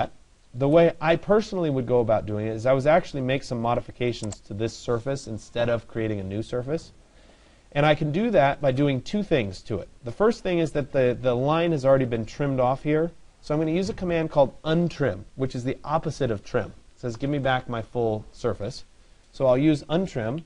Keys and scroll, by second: 20.0 Escape.